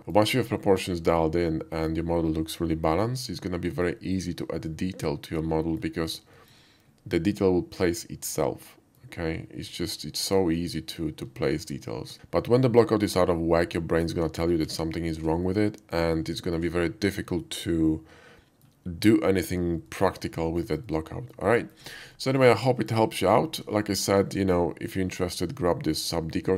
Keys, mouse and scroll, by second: 0.0 middle click, 0.3 scroll up 1, 1.0-1.9 shift+middle drag, 3.3-3.9 shift+middle drag, 4.7-5.8 middle drag, 6.4 shift+middle click, 8.0-9.0 shift+middle drag, 9.7-10.9 middle drag, 11.4 shift+middle click, 15.0 shift+middle drag, 15.4-16.0 shift+middle drag, 16.2 shift+middle drag, 16.4 shift+middle drag, 17.4-18.7 shift+middle drag, 19.3 shift+middle drag, 19.9-20.3 shift+middle drag, 20.4 shift+middle click, 20.8-21.3 shift+middle drag, 21.6 shift+middle drag, 22.2-22.5 shift+middle drag, 22.7 shift+middle drag, 23.8 shift+middle drag.